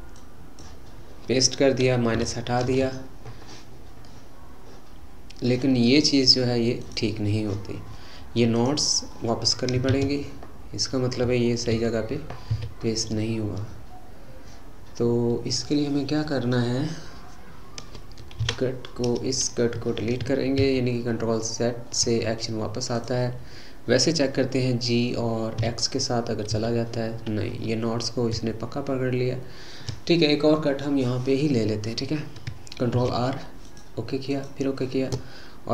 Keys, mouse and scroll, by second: 4.1-6.8 middle drag, 6.8 click, 8.5 click, 9.9 ctrl+z, 11.7 ctrl+z, 12.5 ctrl+z, 18.4 Delete, 20.7 ctrl+z, 22.9 click, 25.6 g, 32.9 ctrl+r.